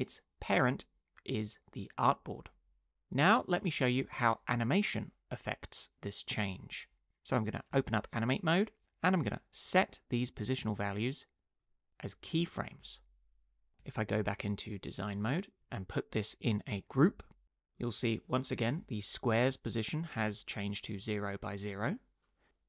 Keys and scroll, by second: 7.7 Tab, 12.8 u, 13.8 Tab, 17.0 super+g.